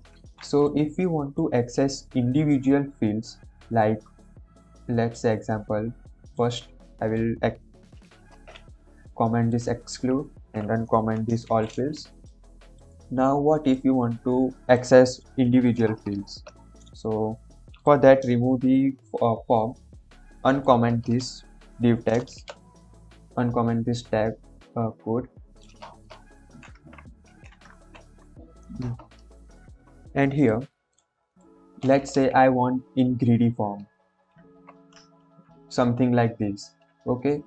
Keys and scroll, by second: 0.0 ctrl+s, 8.3 ctrl+/, 10.3 ctrl+/, 11.4 ctrl+s, 15.9 BackSpace, 18.3 ctrl+s, 21.0 BackSpace, 22.4 shift+., 25.8 BackSpace, 27.2 ctrl+z, 27.6 ctrl+s, 29.0 BackSpace, 29.3 ctrl+s.